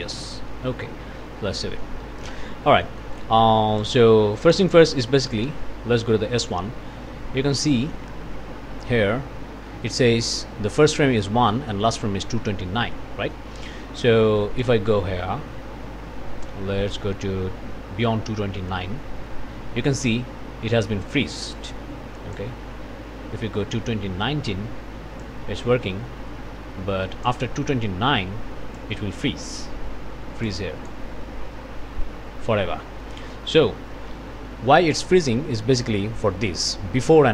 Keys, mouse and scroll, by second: 0.5 click, 1.5 ctrl+s, 2.8 click, 3.8 click, 4.4 click, 5.4 1, 7.2-7.7 scroll down 2, 14.6-20.2 drag, 21.5-22.6 drag, 25.2 click, 30.4 click, 33.0 click, 33.9 ctrl+s.